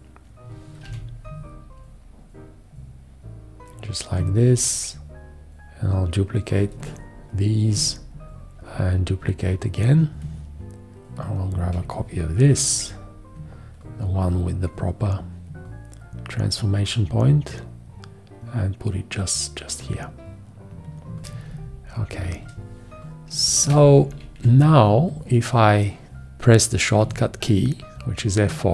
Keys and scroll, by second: 0.8 v, 10.9 BackSpace, 21.4 space, 24.1 Up, 27.0 F4.